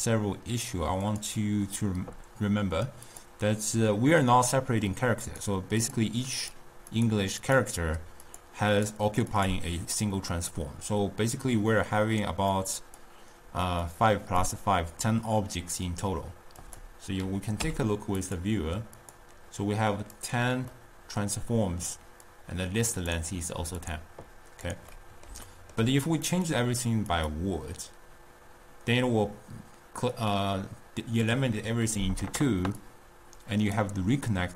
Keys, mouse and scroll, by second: 1.0-5.4 drag, 5.8 click, 6.4 click, 7.0 click, 7.5 click, 8.7 click, 9.3 click, 12.6 click, 14.0 click, 16.6 click, 17.6 w, 20.9-22.3 middle drag, 22.3 drag, 23.8 drag, 24.9-26.3 middle drag, 26.3-29.4 drag, 30.3-33.2 drag.